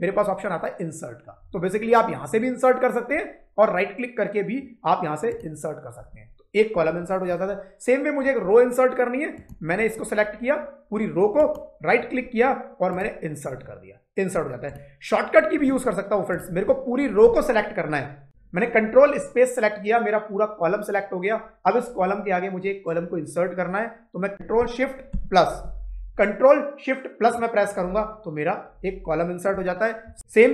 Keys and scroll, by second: 24.3 ctrl+=, 25.0 ctrl+shift+=, 29.9 Down, 30.1 Right.